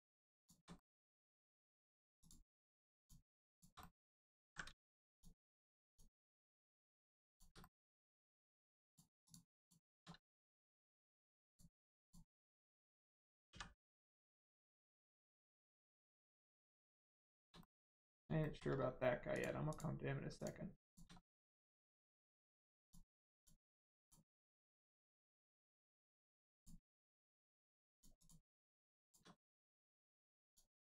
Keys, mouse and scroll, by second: 0.3 shift+click, 0.7 middle click, 1.1 shift+middle click, 2.1 shift+click, 2.9 shift+click, 3.5 shift+click, 3.7 middle click, 4.3 ctrl+z, 5.1 shift+click, 5.8 shift+click, 6.8 shift+click, 7.3 shift+click, 7.5 middle click, 8.8 shift+click, 9.2 shift+click, 9.5 shift+click, 10.3 middle click, 11.4 shift+click, 11.9 shift+click, 13.4 x, 14.6 click, 15.2 middle click, 15.6 shift+middle click, 16.1 scroll down 1, 17.0 scroll down 2, 17.1 shift+middle click, 17.5 middle click, 17.6 middle click, 17.9 scroll up 1, 18.3 shift+middle click, 18.7-19.3 scroll up 1, 19.3 click, 19.6 shift+click, 20.3 shift+click, 20.8 shift+click, 21.1 middle click, 21.5 shift+middle click, 22.7 shift+click, 23.3 shift+click, 24.2 shift+middle click, 24.7 middle click, 24.7 middle click, 25.3 shift+middle click, 26.5 shift+click, 27.9 shift+click, 28.1 shift+click, 28.9 shift+click, 29.3 click, 29.3 middle click, 30.4 shift+click.